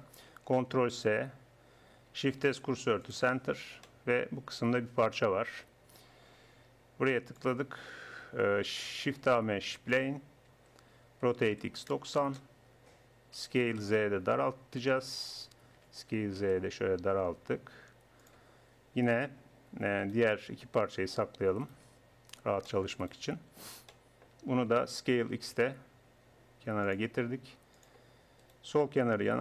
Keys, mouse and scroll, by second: 0.5 ctrl+s, 2.3 shift+s, 5.8 click, 7.3-9.2 drag, 9.3 shift+a, 10.5 Tab, 11.3 r, 13.4 s, 15.2 middle click, 15.9 s, 19.4 Tab, 21.2 h, 21.8 h, 23.2 Tab, 25.3 s, 27.8 click, 28.5-29.4 middle drag.